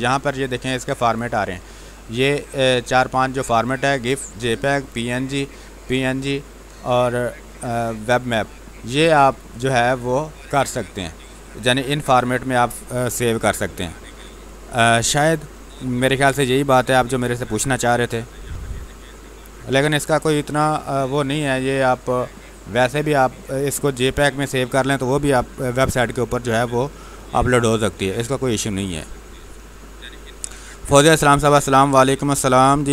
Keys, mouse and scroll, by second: 0.9 click, 9.2 click, 22.8 click.